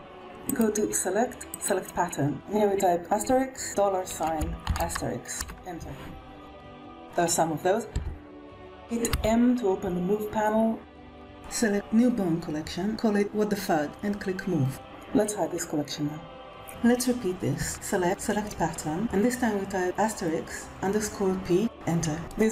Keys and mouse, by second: 0.5-2.2 drag, 2.2 BackSpace, 3.6 click, 4.7-5.9 drag, 6.4 middle click, 6.7 g, 6.8 KP_1, 7.8 g, 9.0 m, 17.8-19.7 drag, 19.7 BackSpace, 22.1 click.